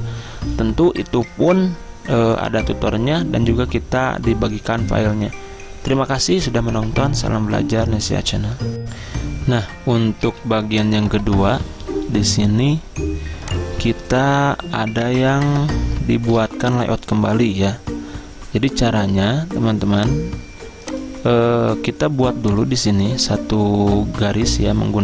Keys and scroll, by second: 10.3 z, 16.4 z.